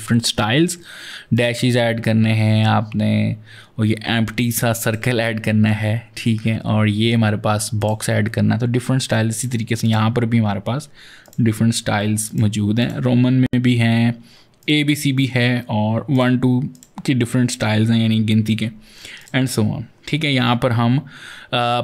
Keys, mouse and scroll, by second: 1.2 click, 4.7 click, 7.6 click, 9.1 click, 9.7 click, 11.1 click, 12.1 click, 12.7 click, 14.4 click, 15.9 click, 16.5 click, 18.9 click, 21.7 click.